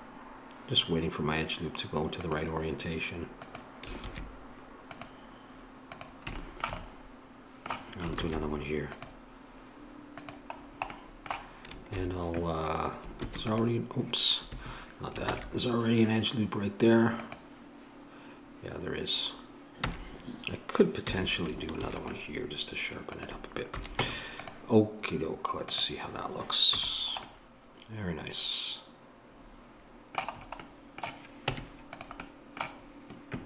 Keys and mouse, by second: 4.1 ctrl+r, 8.2 ctrl+r, 11.7-13.2 middle drag, 13.2 ctrl+r, 15.3 ctrl+z, 17.2-19.8 drag, 19.8 a, 21.1 a, 21.8 ctrl+r, 23.7 a, 24.0 Tab, 25.7-30.3 drag, 26.8 a, 31.5 Tab, 31.5 middle click.